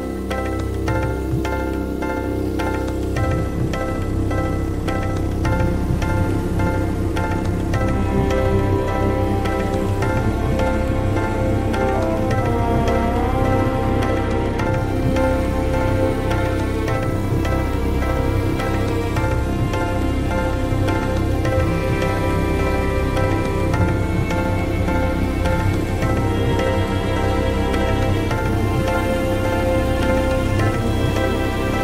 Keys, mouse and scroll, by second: 0.1 click, 1.6 click, 2.7 ctrl+g, 6.6 click, 7.5 click, 8.7 ctrl+v, 10.4 F1, 11.6 ctrl+click, 13.1-14.6 drag, 15.5-17.3 drag, 18.3-20.9 drag, 22.4-27.3 drag, 28.3 click, 30.2-31.8 drag.